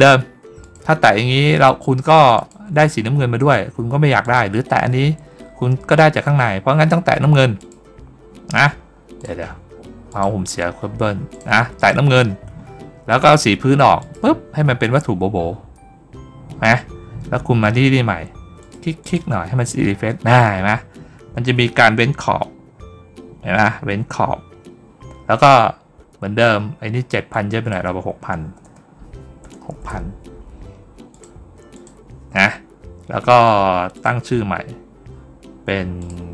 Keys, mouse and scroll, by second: 0.5 click, 2.2 click, 4.1 click, 7.4 click, 10.0 click, 11.2 click, 11.6 click, 13.8 click, 18.5 click, 18.9 click, 27.2 click, 31.0 click, 31.6 click, 33.8 click, 35.8 click.